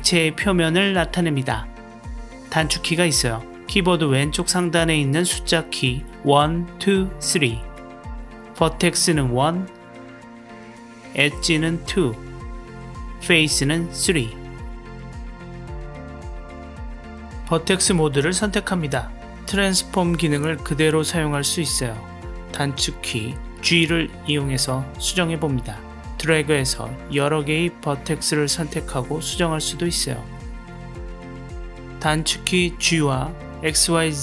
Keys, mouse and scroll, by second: 7.7 1, 10.4 2, 12.9 3, 17.4 1, 20.4 click, 21.6 g, 25.6-26.5 drag, 27.8 g, 30.6 click, 31.1 shift+click, 31.6 middle click, 32.3 g.